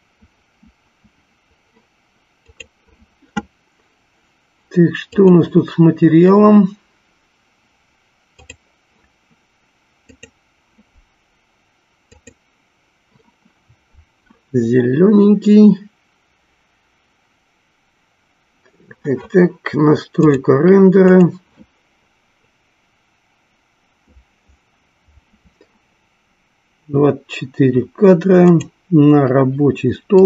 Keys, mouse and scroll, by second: 5.0 click, 20.1 click, 20.9 click, 29.0 click.